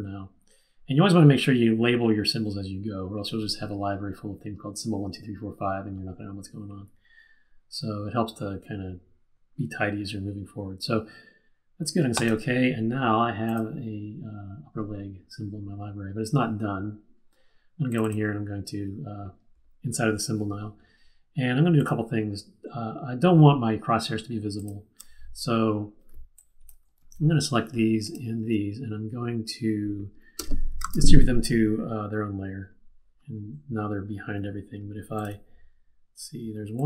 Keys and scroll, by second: 27.0 super+z, 30.8 shift+super+d.